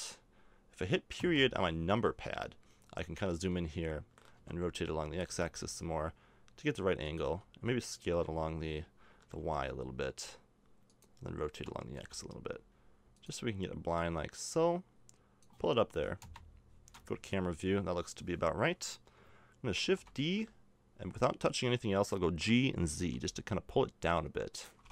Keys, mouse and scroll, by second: 1.1 KP_Decimal, 4.3-7.0 middle drag, 4.3 r, 7.2 s, 11.5 r, 16.2 KP_0, 19.8 shift+d.